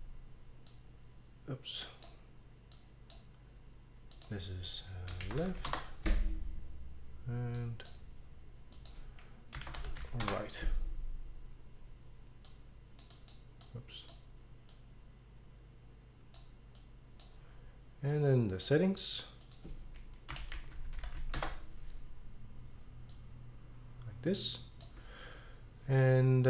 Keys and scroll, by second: 5.0-6.1 typing, 9.4-10.5 typing, 20.1-21.7 typing.